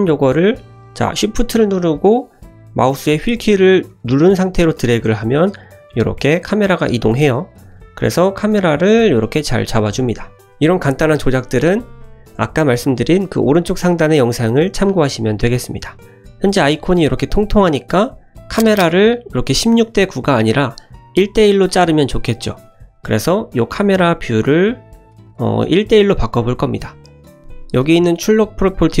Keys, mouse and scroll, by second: 4.0-7.3 shift+middle drag, 8.2 middle click, 8.9 shift+middle drag, 9.4 middle click, 9.9 shift+middle click, 16.9 right click, 17.7 click, 27.0 click, 28.3 click.